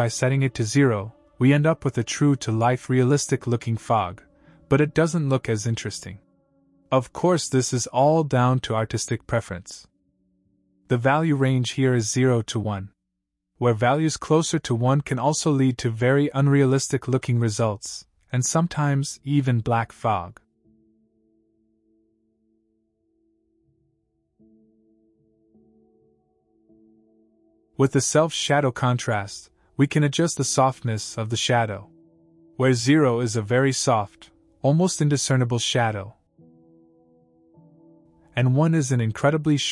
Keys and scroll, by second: 7.3 KP_0, 7.4 Return.